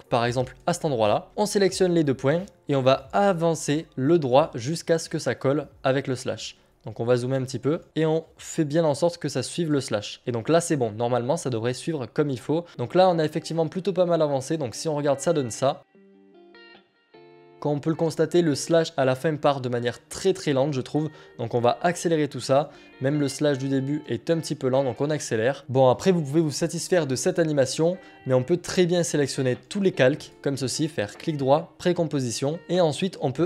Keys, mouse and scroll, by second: 2.4 click, 5.7 click, 7.8 click, 10.1 click, 10.7 click, 11.5 alt+scroll down 4, 11.8 click, 13.3 click, 14.4 click, 15.3 click, 17.5-18.0 scroll up 1, 18.0 middle click, 21.5-26.7 drag, 27.7 click, 31.0 right click.